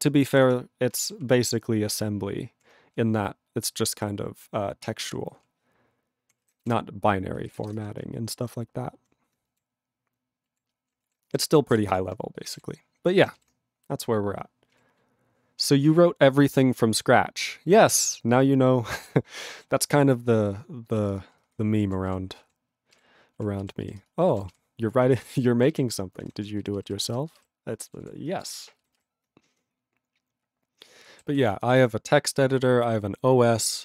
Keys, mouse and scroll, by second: 1.1 ctrl+g, 1.2-2.6 ctrl+p, 5.0 alt+v, 5.4-6.2 ctrl+p, 6.7 Return, 7.7 Return, 8.1-9.0 ctrl+p, 9.5 ctrl+p, 9.6 alt+v, 11.8 Return, 12.4 ctrl+space, 12.4 ctrl+e, 12.5 ctrl+g, 14.7 ctrl+g, 20.9 ctrl+b, 21.1 ctrl+space, 21.5 ctrl+alt+f, 22.4 ctrl+a, 22.9 ctrl+g, 23.3 ctrl+e, 23.6 ctrl+b, 23.8 ctrl+b, 24.0 ctrl+space, 24.4 ctrl+alt+b, 24.5 ctrl+g, 25.2 ctrl+space, 25.5 ctrl+alt+b, 25.7 ctrl+g, 26.1 ctrl+space, 26.2 ctrl+e, 26.6 ctrl+b, 26.8 ctrl+b, 27.0 ctrl+space, 27.5 ctrl+alt+b, 27.7 ctrl+alt+b, 28.0 ctrl+g, 28.3 ctrl+space, 28.4 ctrl+e, 28.5 ctrl+g, 28.8 ctrl+b, 28.9 ctrl+b, 31.3 ctrl+s.